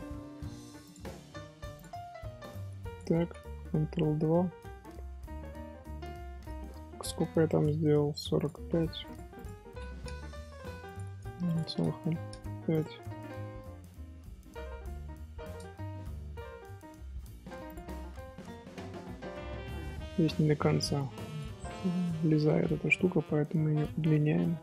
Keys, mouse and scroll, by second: 3.9 ctrl+2, 4.6-7.4 middle drag, 7.4 click, 8.3 click, 9.0 click, 9.3-10.9 drag, 11.2 KP_0, 11.4 click, 11.8 KP_0, 12.7 click, 12.9-14.8 middle drag, 14.8 alt+h, 15.4 click, 15.7-17.6 middle drag, 17.6 click, 17.8-18.3 middle drag, 18.3 scroll up 1, 18.6 Tab, 19.3 scroll up 1, 19.6 scroll down 1, 19.6 middle click, 19.9 z, 20.2 scroll down 1, 20.3 1, 20.9 click, 21.7-22.9 middle drag, 22.9 g.